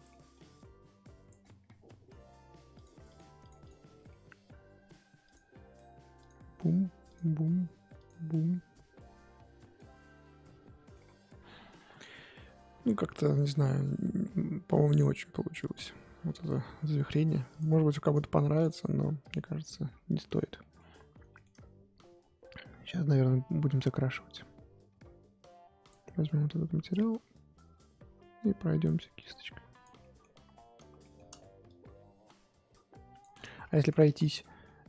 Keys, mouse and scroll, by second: 0.1 middle click, 0.5 click, 1.4-2.1 scroll down 10, 2.8-3.6 drag, 3.9 middle drag, 4.1-6.2 scroll up 2, 6.2 click, 7.1 click, 7.9 click, 8.3-11.0 middle drag, 11.0-12.3 scroll up 7, 12.4-13.5 middle drag, 13.5-16.4 scroll down 3, 16.4 click, 17.6 click, 19.5 click, 19.5-20.0 scroll up 1, 20.6 middle click, 20.8 scroll up 2, 21.3-25.9 shift+middle drag, 25.9 click, 26.9-30.0 drag, 30.0 middle click, 30.2-31.0 scroll up 1, 31.0 shift+middle click, 31.6-33.5 drag, 33.5 ctrl+z, 33.6 ctrl+z, 34.0 ctrl+z, 34.4-34.8 middle drag.